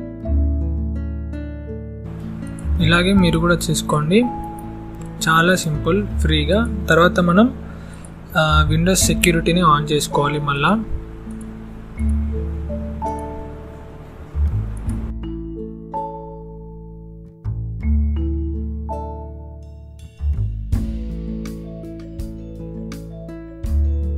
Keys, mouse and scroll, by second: 0.4 right click, 0.9 click, 1.1 right click, 1.9 click, 3.9 right click, 4.5 click, 4.9 right click, 5.9 click, 8.7-10.0 scroll up 2, 10.0 click, 11.8-12.5 scroll down 1, 12.5 click, 12.8 scroll down 1, 14.2 click, 14.8 right click, 15.4 click, 15.6 right click, 16.4 click, 16.7 right click, 17.2 click, 17.6 right click, 18.0 click, 18.1 right click, 18.6 click.